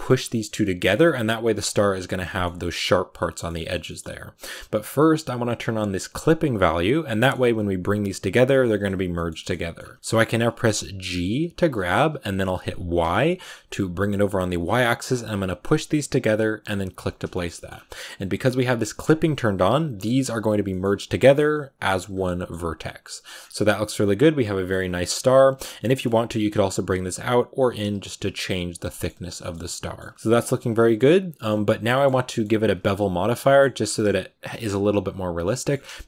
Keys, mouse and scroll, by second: 2.1 middle click, 3.0 scroll down 2, 3.2-6.2 shift+middle drag, 6.2 click, 7.0 middle click, 7.3 g, 9.0-10.9 shift+middle drag, 10.9 g, 17.0 scroll down 3, 17.2 shift+middle click, 17.6 scroll up 2, 18.8 click, 19.7 right click, 19.8 g, 20.6 middle click, 20.7 g, 22.0 scroll down 2, 22.1 middle click, 22.4-23.2 scroll up 5, 23.2 scroll down 6, 23.4 Tab, 23.5-24.7 middle drag, 24.7-25.3 scroll up 4, 24.9 middle click, 25.4 right click, 25.7 g, 28.2 Tab, 28.3 middle click, 29.0 a, 29.1 scroll down 1, 29.3 shift+middle click, 29.9 scroll up 2, 30.1-31.9 middle drag, 31.9 scroll up 2, 32.1 middle click, 32.6-33.2 scroll up 1, 33.2 scroll up 1, 33.2-35.3 middle drag, 35.3 scroll down 1, 35.4 middle click.